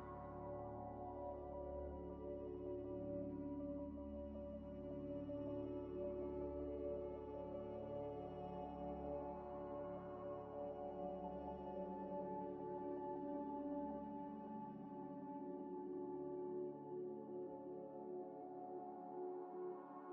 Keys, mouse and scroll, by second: 0.5 s, 0.7 y, 2.1 s, 2.8 g, 3.3 s, 3.9 g, 5.6 Tab, 6.1 Tab, 6.5 a, 6.8 scroll down 1, 7.4-7.9 scroll up 1, 7.9 a, 8.5 scroll up 1, 8.9 s, 9.4 y, 10.4 g, 10.9 s, 12.9 Tab, 13.3 Tab, 14.3 u, 14.9 Tab, 15.3 Tab, 15.8 s, 16.1 y, 17.1-18.7 typing, 20.0 s.